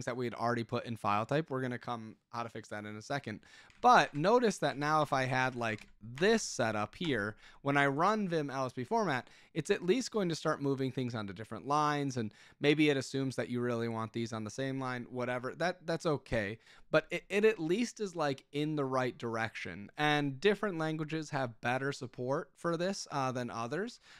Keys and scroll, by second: 3.5-6.7 typing, 7.0 Return, 23.7-24.1 typing.